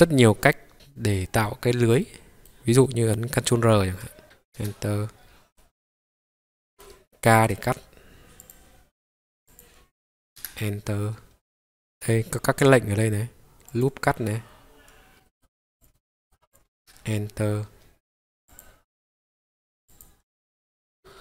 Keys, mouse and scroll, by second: 0.7 middle click, 0.7 scroll down 1, 1.6-2.0 scroll down 2, 2.0 middle click, 3.9 ctrl+r, 4.5 Return, 5.1-5.6 scroll down 3, 5.6-6.1 scroll up 1, 6.1-6.4 scroll up 1, 6.4 middle click, 7.5 k, 10.8 middle click, 13.7 click, 15.2 middle click, 15.2 scroll down 2, 15.8 click, 15.9 middle click, 16.5 click, 16.8 Return, 18.5 click, 19.9 click.